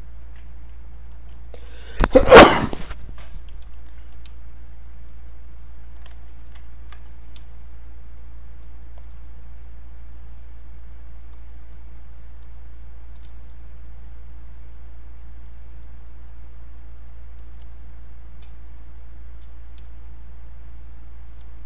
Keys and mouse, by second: 0.5 ctrl+right click, 0.9 click, 3.9 alt+click, 4.3 space, 5.6 click, 6.3 alt+click, 6.6 ctrl+right click, 7.1 ctrl+alt+click, 7.4 space, 8.1 click, 8.1 space, 9.9 click, 11.3 space, 11.7 click, 11.8 space, 13.7 click, 15.8 space, 18.0 click, 18.5 space, 18.9 click, 19.0 space, 21.5 space.